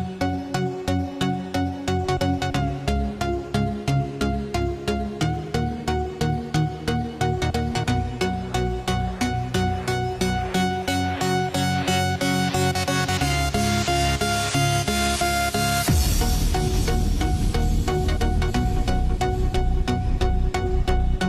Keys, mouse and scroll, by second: 8.7 click, 15.5-21.2 drag.